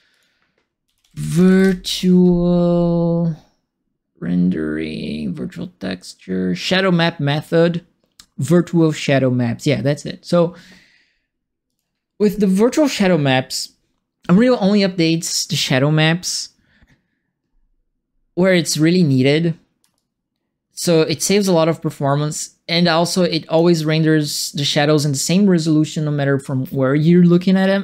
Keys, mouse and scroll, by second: 0.1 click, 0.6-1.9 typing, 11.6 click, 19.9-23.5 alt+drag.